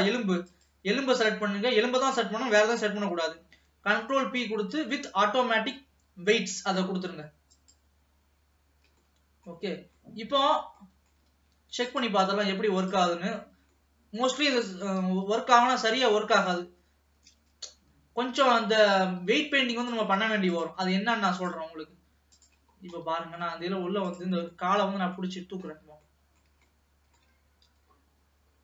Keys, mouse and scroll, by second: 0.5 shift+click, 1.5-3.9 scroll down 2, 3.9 ctrl+p, 9.1 middle click, 9.7-10.2 scroll up 2, 10.2-11.9 middle drag, 11.9 ctrl+s, 12.0 ctrl+click, 12.8 click, 13.8-14.8 middle drag, 14.8 r, 18.9-20.1 drag, 20.6 click, 21.4-22.8 drag, 22.8 scroll down 1, 23.1-24.2 middle drag, 24.2 click, 25.3 middle click, 25.8-26.2 scroll up 1, 26.2-27.8 middle drag, 27.8 g.